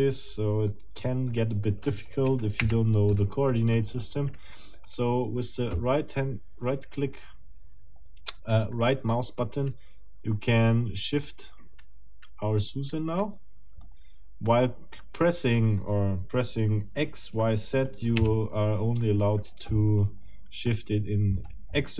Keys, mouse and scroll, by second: 0.7 middle click, 2.6 Delete, 3.1 click, 3.7 middle click, 4.3 right click, 4.9 click, 5.7-9.9 right drag, 11.1 click, 11.8 right click, 12.9 right click, 18.1 x.